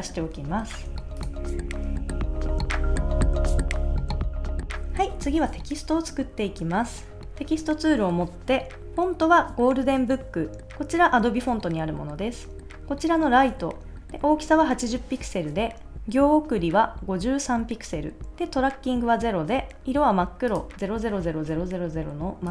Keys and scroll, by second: 0.0 super+g, 0.9 super+s.